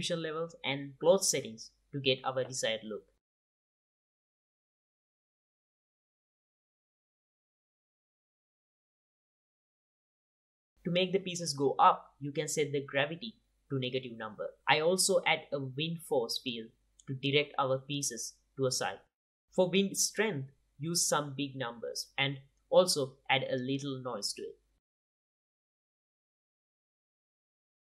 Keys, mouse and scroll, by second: 0.6 click, 1.0 space, 2.3 space, 2.7-4.5 drag, 4.2 space, 8.7 space, 9.0-9.6 middle drag, 10.1 click, 10.8 click, 12.5 click, 14.5-15.4 drag, 14.5 a, 15.8 middle click, 16.0 click, 16.0 middle click, 16.4 r, 18.0 r, 20.1 g, 21.8 click, 22.3 KP_0, 22.4 KP_0, 23.1-24.2 drag, 25.8 click, 26.0-26.5 middle drag, 26.6 middle click, 26.8 click, 27.3 click, 27.4 space.